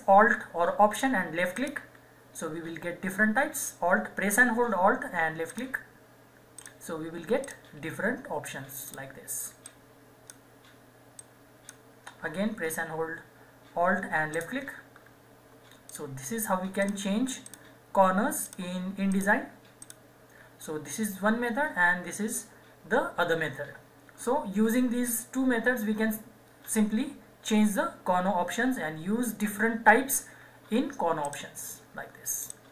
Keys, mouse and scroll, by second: 0.1 ctrl+z, 1.7 alt+click, 5.5-14.4 alt+drag, 31.3 alt+click.